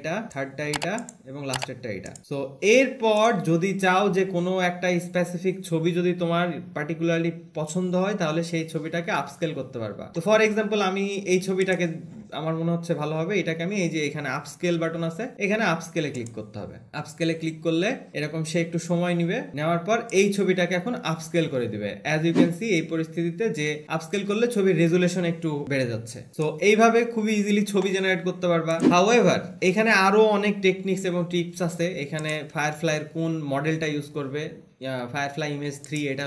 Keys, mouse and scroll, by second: 2.2 click, 3.6 click, 12.2 click, 15.0 alt+`, 18.1 alt+`, 20.5 click, 26.7 click, 31.2-31.8 scroll.